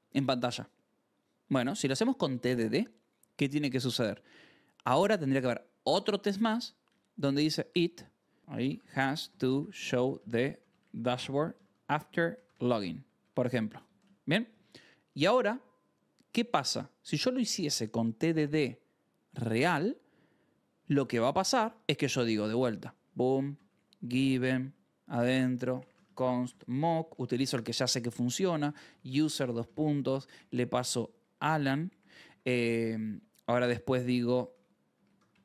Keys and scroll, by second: 3.7 j, 4.2 j, 6.5-13.9 typing, 6.8 Return, 13.9 Return, 22.6-24.2 typing, 24.3 Return, 25.3-32.8 typing, 33.0 Return, 34.4-35.4 typing.